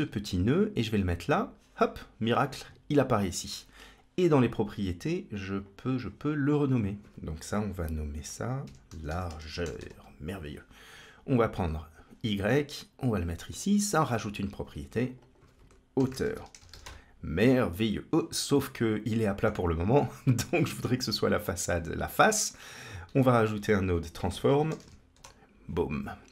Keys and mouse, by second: 5.5 click, 6.5 click, 6.6-10.1 drag, 11.6-13.5 drag, 14.9 click, 15.0-17.3 shift+drag, 18.5-19.3 middle drag, 20.5 middle click, 22.1-22.4 drag, 22.9 shift+a.